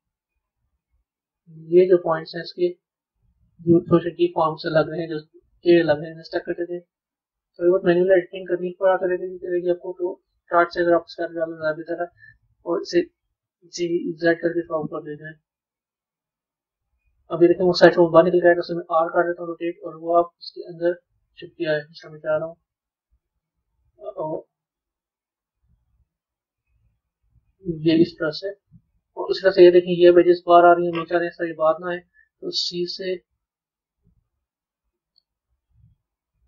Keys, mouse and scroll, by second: 9.9-12.9 middle drag, 12.9 click, 20.9-23.9 middle drag, 27.0-30.0 middle drag.